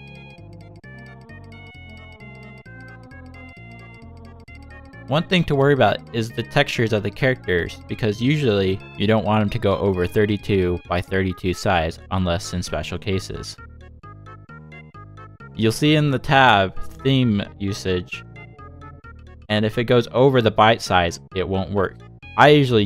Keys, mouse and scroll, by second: 0.4 click, 2.0 shift+click, 2.3 click, 2.5 Tab, 2.6 Tab, 2.9 click, 4.0-4.7 scroll down 2, 4.3 z, 4.9 scroll up 3, 6.0 middle click, 8.3 middle click, 10.4 click, 10.8 click, 12.2 scroll down 3, 12.7-13.5 scroll down 4, 13.5-13.8 scroll down 1, 14.2-14.8 scroll down 2, 14.8 click, 15.2-16.1 scroll down 2, 16.5 click, 17.6 click, 22.1 click.